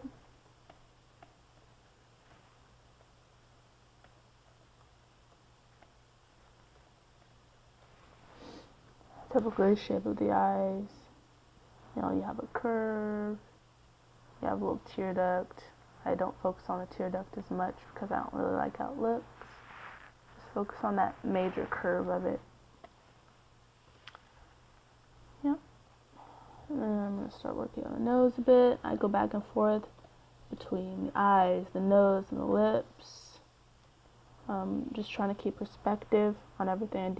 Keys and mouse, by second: 6.0-7.0 d, 14.2-17.4 d, 17.9-22.0 d, 24.2 click, 25.2 n, 27.9 c, 28.8-31.6 drag.